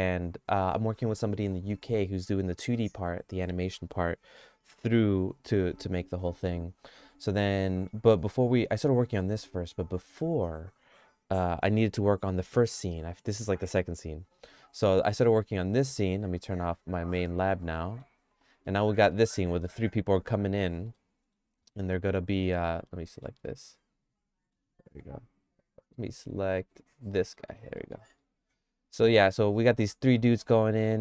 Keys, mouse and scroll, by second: 7.6 middle click, 14.6 middle click, 17.3 click, 17.7 middle click, 18.6 middle click, 19.1 middle click, 20.1 middle click, 21.0 shift+middle click, 23.1 middle click, 23.5-24.6 shift+middle drag, 25.4 click, 25.9 click, 27.3 middle click, 27.8 middle click, 28.2-31.0 shift+middle drag.